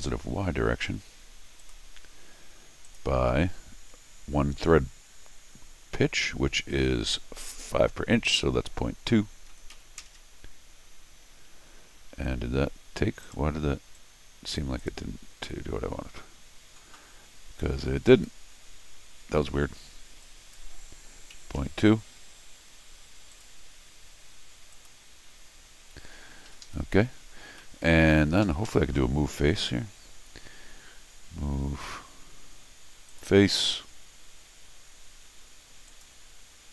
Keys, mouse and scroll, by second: 1.6 click, 2.8 click, 13.2 right click, 13.9 click, 14.8 click, 18.1 click, 20.2 click, 23.3 click, 24.7 click, 26.5 Escape, 26.6 Escape, 27.4 middle click, 27.4 scroll up 2, 27.6 middle click, 28.4 Escape, 28.7 Escape, 33.1 click, 33.9 scroll up 1, 35.9 click.